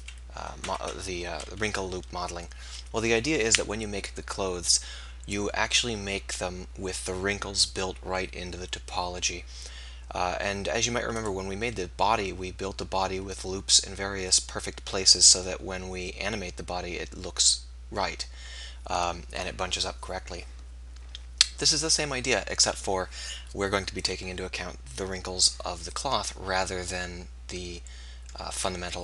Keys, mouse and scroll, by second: 0.6 KP_1, 0.8 KP_3, 1.7 KP_1, 11.2-13.0 right drag, 28.8 KP_1.